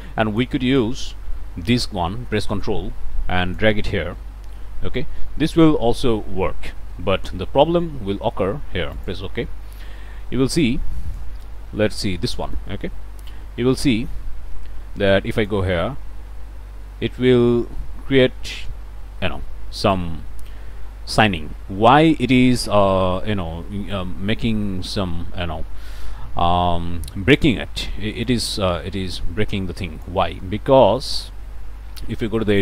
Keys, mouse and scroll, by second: 2.4-3.8 ctrl+drag, 9.0 click, 10.6 click, 11.3-12.4 middle drag, 11.3 scroll down 1, 11.5 scroll up 1, 11.7 scroll down 1, 11.8-12.3 scroll up 1, 12.3 scroll down 1, 12.4-14.7 drag, 15.3 click, 19.8 click, 28.2-30.2 drag, 31.0 click, 32.5 click.